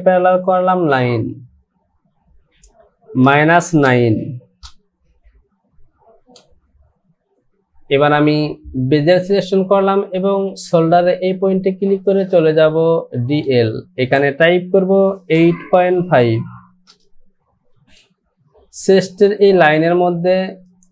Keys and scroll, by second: 3.2 KP_Subtract, 3.8 KP_9, 4.6 Return, 16.2 KP_Decimal.